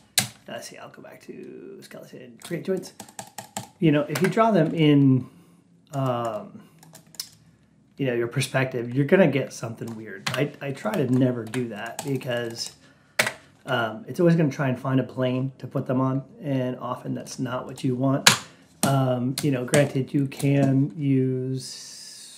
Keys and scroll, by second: 4.0 Return, 10.1 Delete, 13.1 Return, 18.1 Delete.